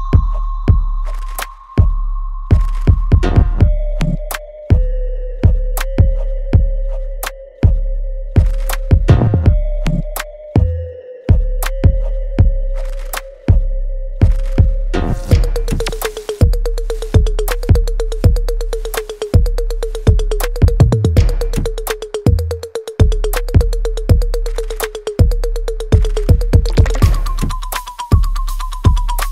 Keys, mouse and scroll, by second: 0.4 alt+click, 1.0 alt+right click, 2.4 click, 6.5 shift+click, 7.9-11.3 alt+drag, 11.3-12.9 alt+middle drag, 12.9-15.1 alt+drag, 19.0 click, 19.6-27.0 alt+drag, 27.8 alt+click.